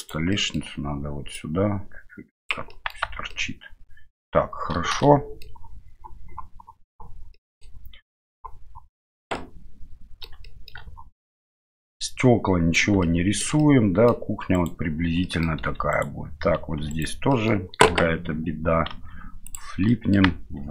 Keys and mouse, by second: 0.0 right click, 0.3 middle click, 1.4-2.5 drag, 2.8 middle click, 3.0 Tab, 3.3-4.2 middle drag, 5.0-5.4 shift+middle drag, 7.3 middle drag, 9.3-10.2 middle drag, 10.4 shift+middle drag, 11.3-12.8 middle drag, 13.0-13.4 shift+middle drag, 13.6-14.1 middle drag, 14.6 right click, 15.2 middle click, 15.6 Tab, 15.9 right click, 16.8 3, 16.9 right click, 17.3 middle click, 18.9 alt+n, 19.9 middle click.